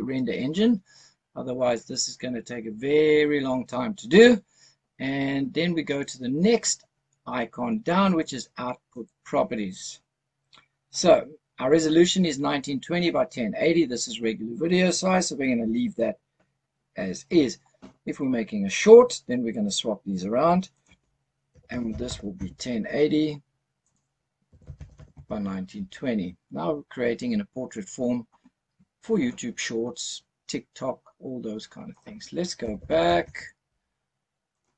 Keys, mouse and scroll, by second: 8.9 click, 20.6-22.3 drag, 23.7-25.1 drag, 26.1-26.5 scroll down 2, 26.5 scroll up 2, 27.5-29.2 scroll down 1, 31.8-33.1 drag, 34.4-34.7 drag.